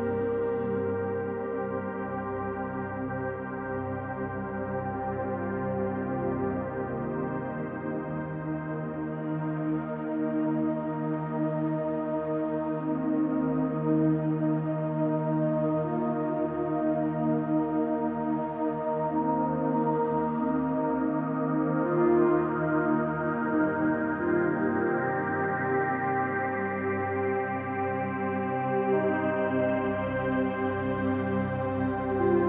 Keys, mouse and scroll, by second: 0.1-0.4 scroll up 2, 0.4-1.0 middle drag, 1.7 f, 2.2-2.9 middle drag, 3.2-3.6 middle drag, 4.3 KP_3, 5.1-6.2 scroll down 1, 6.2-7.8 middle drag, 8.7 e, 10.2 click, 10.6-11.7 scroll down 2, 11.8-12.6 drag, 13.3-14.3 drag, 14.6-15.0 scroll up 2, 15.0-16.0 middle drag, 17.0-19.7 middle drag, 20.0 scroll up 1, 20.1-20.5 scroll down 2, 20.5-20.9 middle drag, 21.1-23.0 scroll up 1, 23.7 click, 24.9 3, 25.1 click, 26.4 x, 28.2 click, 29.0 click, 29.9 2, 30.1 click, 30.9 shift+click, 31.5 shift+click, 32.3-32.4 right drag.